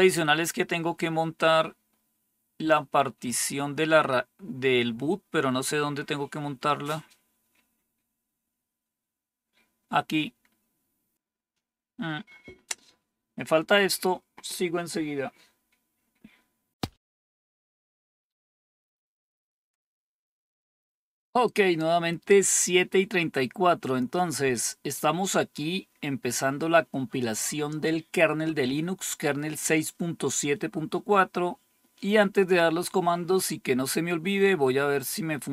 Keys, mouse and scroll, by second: 1.8-2.4 scroll down 3, 3.2-3.7 scroll down 2, 5.2-6.3 scroll down 3, 6.3-7.4 scroll down 1, 7.6-11.1 scroll down 1, 11.1-16.1 scroll down 1, 16.1-16.7 scroll down 1.